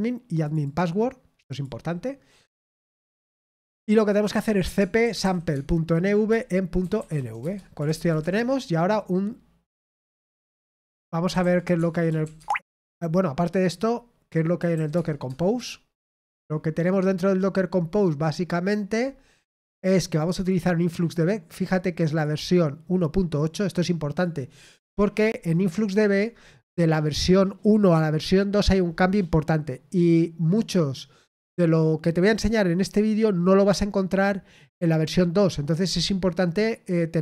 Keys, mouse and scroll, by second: 0.4 click, 1.5 click, 5.5 typing, 8.1 typing, 12.3 typing, 20.2 click, 22.0 click, 23.3-24.6 drag.